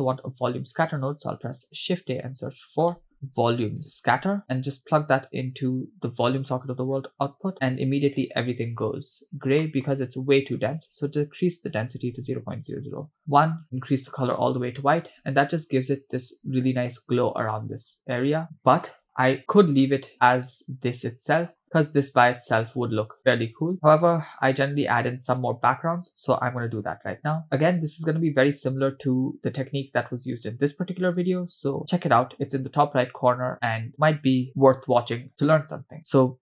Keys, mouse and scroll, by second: 1.8 shift+a, 5.2-6.9 drag, 9.6 middle click, 10.0-10.5 scroll up 2, 10.5-13.4 drag, 12.0 0, 15.6-16.3 scroll up 4, 17.9-19.0 scroll down 3, 19.9 space, 21.6-22.1 scroll up 2, 22.8 space, 23.5 space, 23.7 space, 25.3-25.8 scroll down 2.